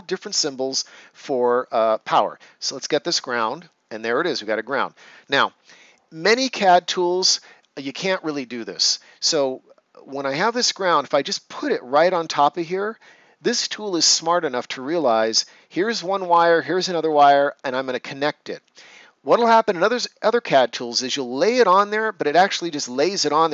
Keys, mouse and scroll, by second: 3.0 click.